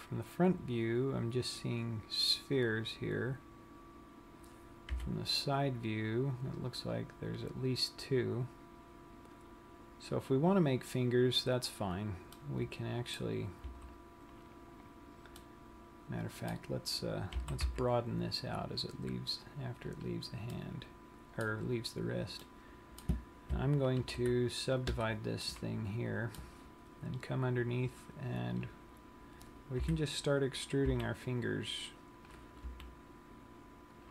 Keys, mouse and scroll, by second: 0.1 KP_1, 0.9 scroll down 1, 2.8-3.2 scroll up 3, 5.2 KP_3, 8.7 scroll up 1, 12.8 middle click, 14.2 z, 15.6 middle click, 17.7 s, 20.3 click, 20.8 middle click, 22.8 middle click, 24.4 ctrl+r, 25.8 middle click, 28.1 click, 28.6 click, 30.0 KP_3, 31.4 e, 32.7 click, 33.3 r.